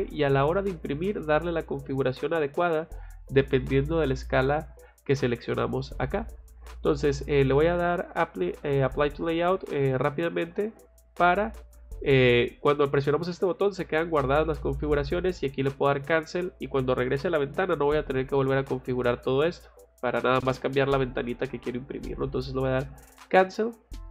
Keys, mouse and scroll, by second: 8.3-11.2 drag, 23.1 click, 23.9 scroll down 2.